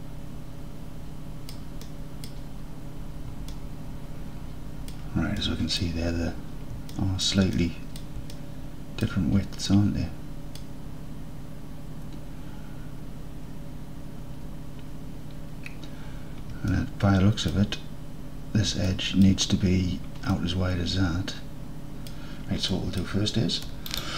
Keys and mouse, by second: 0.0-0.3 alt+drag, 0.8-1.4 alt+drag, 1.5 alt+drag, 1.9 drag, 2.2 drag, 3.6 alt+middle click, 3.7-5.0 alt+drag, 5.4 middle drag, 5.7 click, 7.0-7.3 alt+drag, 7.6 drag, 8.0 click, 8.4-9.1 alt+drag, 9.7-10.6 drag, 16.8-17.6 alt+drag, 18.9-19.3 alt+drag, 20.4-22.2 drag, 21.7-22.2 right drag, 22.8 alt+drag, 24.0-24.1 drag.